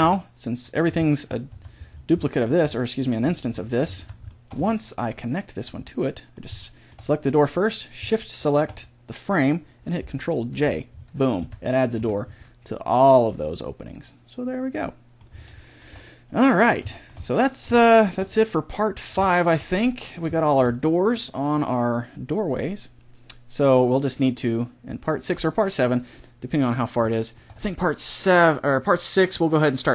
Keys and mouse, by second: 0.6-2.3 right drag, 1.5 Tab, 4.1 Tab, 5.1 right click, 5.9-10.3 middle drag, 10.5 ctrl+j, 10.9 middle click, 11.3 a, 11.9 z, 24.2-26.9 middle drag, 28.9-29.9 middle drag.